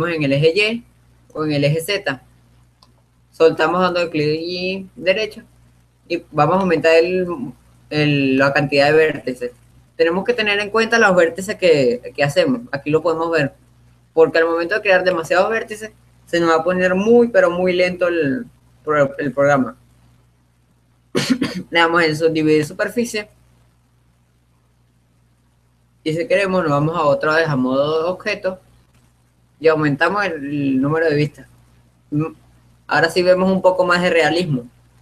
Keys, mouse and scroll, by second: 3.6-5.0 right drag, 7.0-11.3 drag, 16.3-17.6 drag, 27.0 Tab, 30.6-32.0 drag, 32.3-33.4 middle drag, 33.4-35.0 drag.